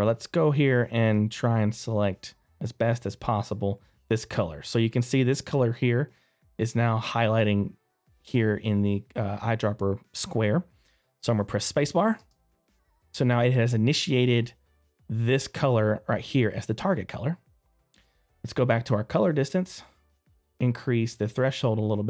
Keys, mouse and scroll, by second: 0.6 right click, 1.4-2.0 scroll up 1, 12.2 space, 13.3 scroll down 1, 13.9 middle click, 18.0 click.